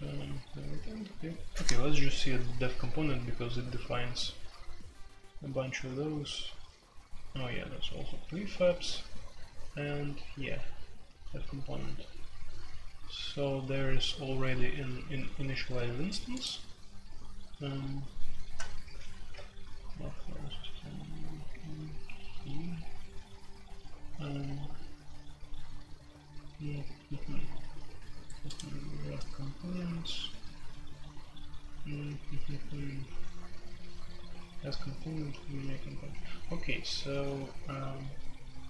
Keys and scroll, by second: 0.8 ctrl+d, 19.1 ctrl+g.